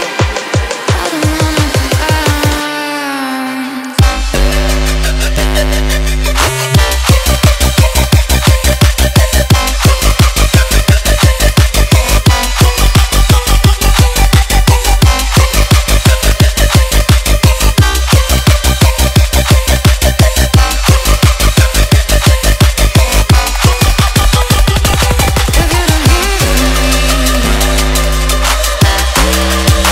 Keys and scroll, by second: 2.2 KP_3, 2.5 KP_9.